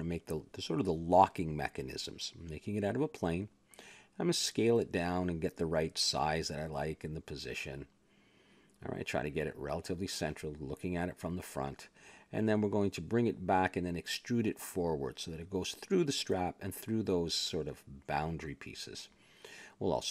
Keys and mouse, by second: 0.2 shift+s, 0.9 a, 1.1 Tab, 1.7 shift+a, 3.2 r, 4.2 Tab, 4.9 s, 6.3 click, 7.2 KP_Decimal, 8.1 s, 9.5 click, 10.8 KP_1, 11.3-12.4 middle drag, 12.6-14.4 middle drag, 14.4 click, 16.1 e, 18.2 ctrl+b, 19.7 a, 19.8 Tab.